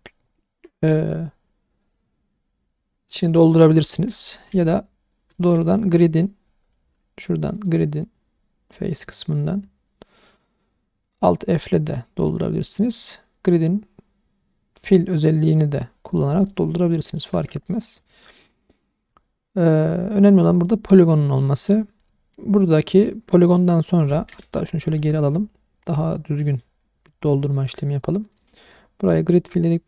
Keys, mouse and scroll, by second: 3.9 middle click, 5.3 ctrl+z, 7.5-15.5 drag, 16.5 middle click, 17.3 1, 17.7 click, 18.1-20.3 middle drag, 18.1-18.9 scroll up 1, 21.4 middle click, 22.9 middle click, 24.4 ctrl+z, 24.9 ctrl+z, 25.9 ctrl+z, 28.3-29.4 drag.